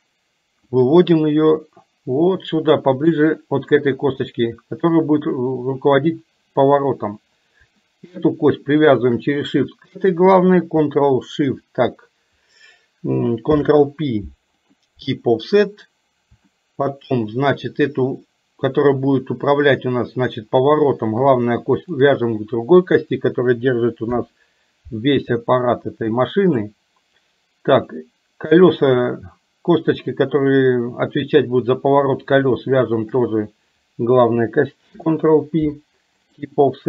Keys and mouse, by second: 1.0-3.3 drag, 4.3 shift+middle click, 8.9 shift+click, 13.5 ctrl+p, 16.5 shift+middle click, 17.5 click, 24.2 ctrl+p, 27.9 click, 33.0 shift+click, 34.9 ctrl+p.